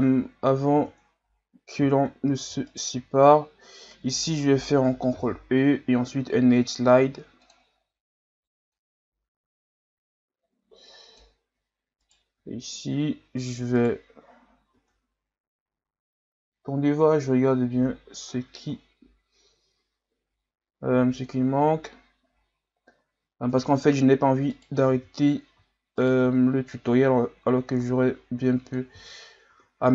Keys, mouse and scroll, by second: 0.4-0.8 scroll up 2, 0.8 Tab, 2.1-2.7 scroll down 2, 2.7 alt+right click, 5.1 ctrl+e, 12.0 alt+right click, 13.8 right click, 14.5 scroll down 1, 14.8 Tab, 15.8 scroll down 6, 18.0 scroll up 2, 18.6 scroll up 2, 19.4 scroll down 4, 20.0 scroll up 4, 21.3-22.3 scroll down 5, 22.3-23.3 scroll up 4, 23.3-24.5 scroll up 3, 24.5 right click, 25.0 Tab, 26.0 alt+right click, 26.7-29.0 drag, 29.0 Tab, 29.5 a, 29.8-29.9 scroll down 6.